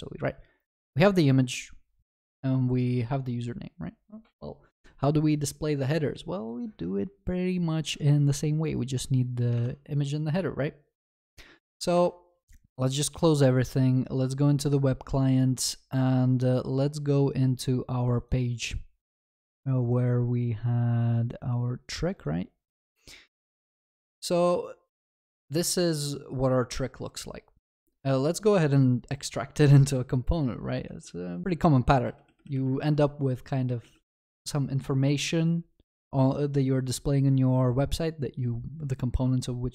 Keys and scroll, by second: 12.0 alt+w, 31.4 alt+Insert.